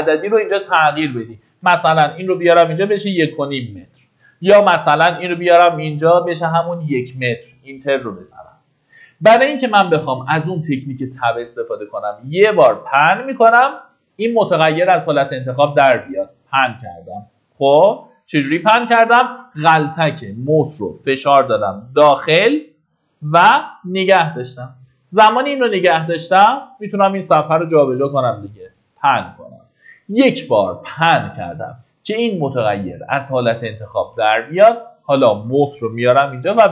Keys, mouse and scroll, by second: 1.0 Right, 1.3 Right, 1.9 shift+Right, 2.6 KP_5, 4.3 BackSpace, 12.0-13.6 middle drag, 14.6 right click, 15.5 click, 16.0-29.6 middle drag, 36.5 Tab.